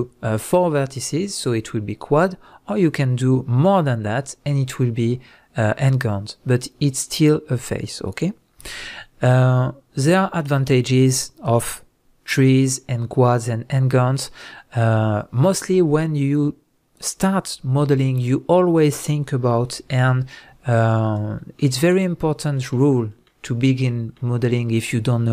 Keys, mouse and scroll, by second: 18.2 Tab, 19.7 x, 21.0 click, 21.6-25.3 shift+middle drag, 23.6 scroll up 2.